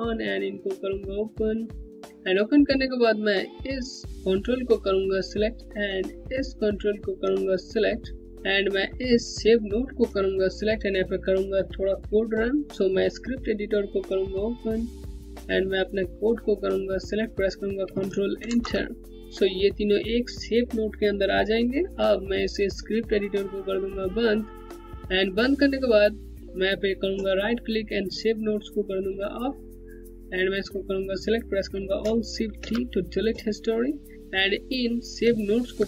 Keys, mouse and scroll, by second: 0.1 click, 1.1-2.0 scroll down 1, 2.0 click, 4.1 click, 6.5 ctrl+click, 8.7 ctrl+Num_Lock, 9.4 ctrl+click, 13.9 click, 18.1 ctrl+Return, 24.9 click, 26.3 click, 26.6 right click, 30.1 click, 32.1 alt+shift+d, 33.9 click, 35.1 ctrl+click.